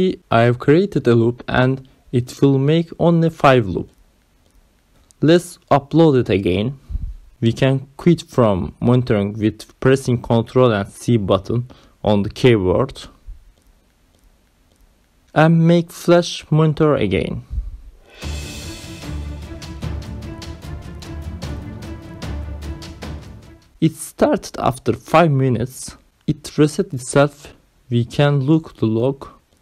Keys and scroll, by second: 1.0 Right, 1.5 BackSpace, 3.1 ctrl+s, 6.9 ctrl+c, 8.4 Up, 9.7 Return.